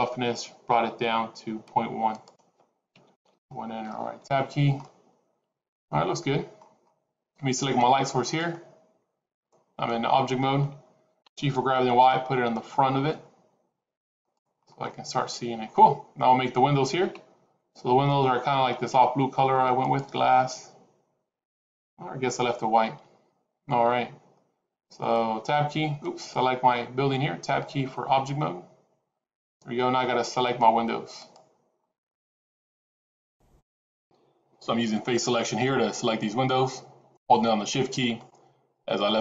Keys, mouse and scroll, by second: 1.0 scroll down 2, 2.0 click, 4.1 Tab, 4.7 middle click, 6.7-7.0 scroll down 6, 8.1 click, 11.2 g, 14.4-15.5 scroll up 10, 15.5-16.0 scroll down 5, 25.3 Tab, 25.9 click, 27.3 Tab, 31.1 click, 37.0 shift+click, 38.0 shift+click, 39.0 shift+click.